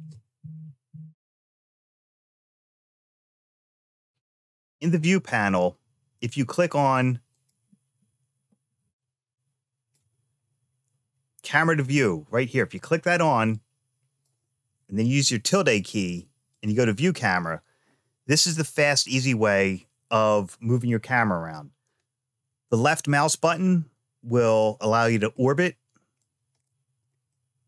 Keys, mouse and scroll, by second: 7.1 click, 8.7 click, 13.3 click, 15.3 `, 20.8-25.1 middle drag, 25.9 click, 27.1-27.6 shift+middle drag.